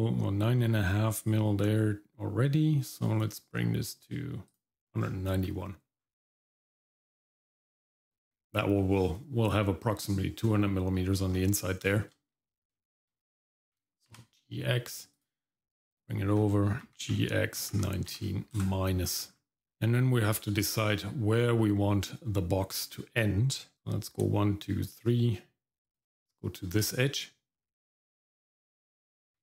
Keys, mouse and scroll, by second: 5.0-5.4 scroll down 2, 5.4 middle click, 6.0-6.8 scroll down 1, 7.0-8.0 shift+middle drag, 11.3-11.9 scroll up 2, 11.8 shift+middle click, 12.8 shift+middle click, 14.1 ctrl+r, 16.8 g, 19.3-19.6 scroll down 1, 19.6 shift+middle click, 20.7 shift+middle click, 21.5-22.3 scroll up 1, 23.7 click, 23.7 middle click, 25.8 click, 26.7-28.9 scroll up 2.